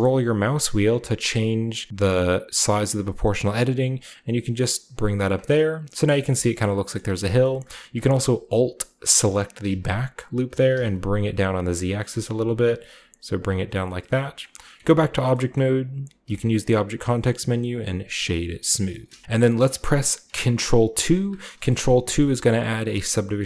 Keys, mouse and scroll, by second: 0.2 scroll down 1, 0.3 scroll up 1, 0.5 scroll down 1, 0.7 scroll up 1, 0.9 scroll down 1, 1.0 scroll up 1, 1.1-12.8 scroll down 1, 12.8-13.4 scroll up 1, 12.8 g, 13.4 scroll up 1, 13.4-15.2 drag, 14.4 middle click, 14.8 Tab, 15.6-16.1 middle drag, 15.6-17.3 scroll up 2, 16.2 w, 18.1-19.4 drag, 18.7-19.2 scroll down 2, 18.9-20.9 middle drag, 19.2 Tab, 21.0 ctrl+2, 21.6 shift+middle click, 22.5 click.